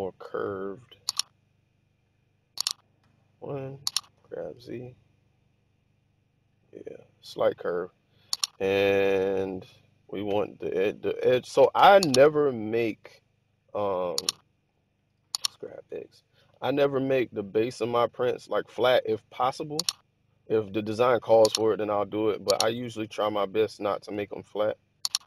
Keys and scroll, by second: 2.9 1, 4.1 g, 4.6 z, 15.5 g, 15.8 x, 24.1 super+z.